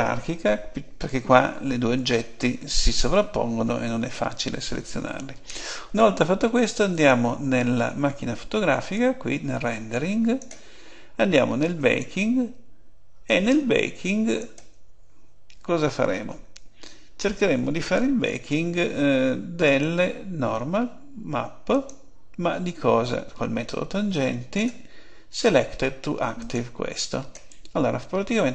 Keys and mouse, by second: 6.8-8.7 drag, 8.9-10.8 drag, 11.7-15.0 drag, 19.6-21.5 drag, 24.0-26.0 drag, 26.4-28.5 drag.